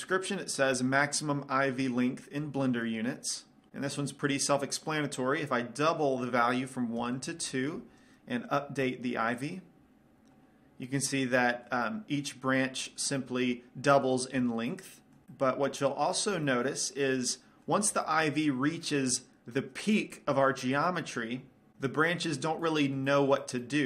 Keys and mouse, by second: 6.0-11.4 drag, 11.3 right click, 11.4-15.3 middle drag, 15.5-20.5 middle drag, 21.0 middle click, 21.9-23.1 middle drag, 23.4 middle click.